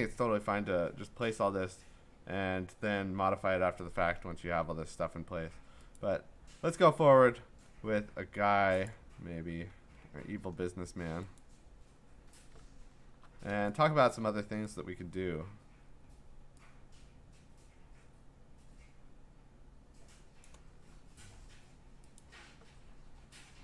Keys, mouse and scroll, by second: 4.4 scroll, 6.0 click, 7.7-8.9 scroll, 8.9 click, 8.9 scroll, 10.2 v, 11.4 click, 12.7 scroll, 14.1 click, 14.7 middle click, 15.2-18.3 scroll, 20.4 click, 21.2 v, 22.2 click, 22.9-23.5 scroll.